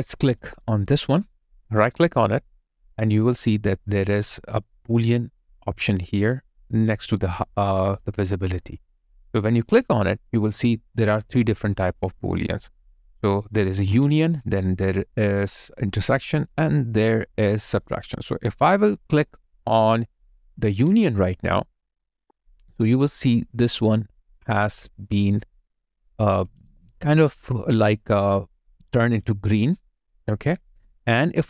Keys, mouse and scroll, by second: 26.6 alt+right click, 27.5 alt+middle click, 28.6 alt+right click, 28.9 alt+click, 29.5 right click.